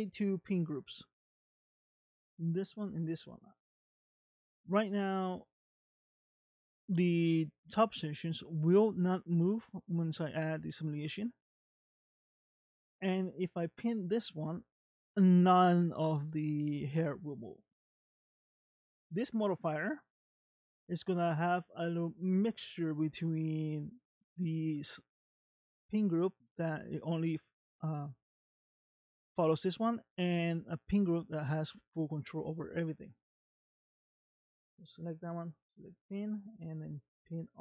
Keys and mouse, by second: 0.2 click, 0.8 click, 1.3 click, 2.3 click, 2.9 click, 4.8 click, 12.9 click, 19.2 click, 34.5-35.6 drag, 36.3-37.6 drag.